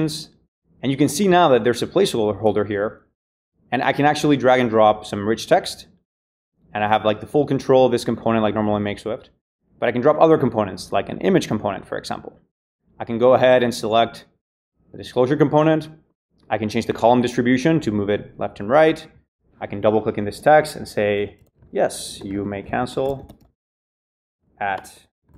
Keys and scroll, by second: 20.9-25.3 typing.